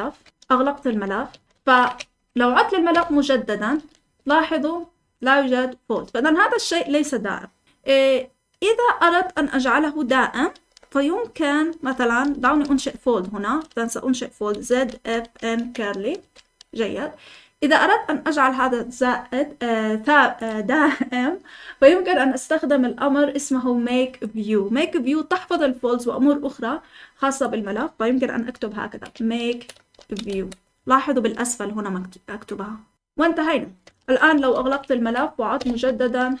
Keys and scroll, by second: 0.0-0.3 typing, 1.4 ctrl+l, 1.4 typing, 2.1 Up, 2.9 Return, 4.1-15.5 typing, 16.1 Escape, 28.8-31.1 typing, 32.9 Return, 34.0 typing, 34.5 Return, 34.9 Up, 35.5 Return, 36.3-36.4 typing.